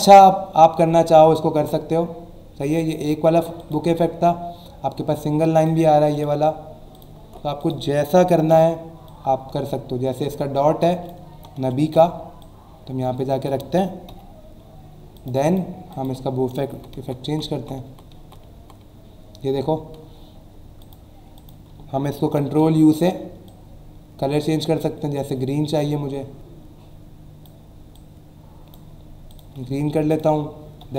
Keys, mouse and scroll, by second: 1.2 click, 1.5 alt+Tab, 3.6 click, 4.4 scroll down 1, 5.5 click, 6.1 right click, 6.9 click, 7.2 alt+Tab, 9.1 click, 11.1-12.6 typing, 12.4 click, 14.1 0, 15.1 click, 15.4 click, 20.8 click, 21.3 click, 22.2 ctrl+u, 23.4 click, 27.9 click, 29.3 click, 30.1 click, 30.8 e.